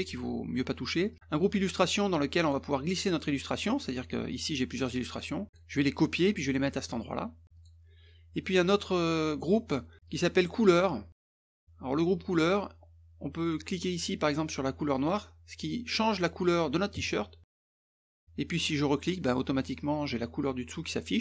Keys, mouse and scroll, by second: 1.1 click, 2.4 click, 4.3 click, 4.8 click, 5.5 click, 7.5 click, 10.1 click, 11.3 click, 15.0 click, 15.6 middle click, 19.6 click.